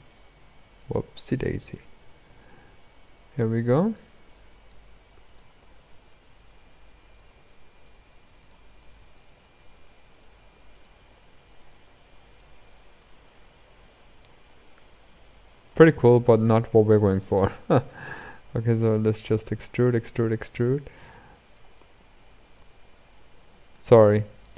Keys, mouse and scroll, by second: 1.2 click, 4.1 middle click, 5.0 click, 8.5-10.4 middle drag, 10.4 click, 13.6-15.8 scroll down 11, 15.8 scroll up 4, 19.4-20.5 middle drag, 21.0 middle click.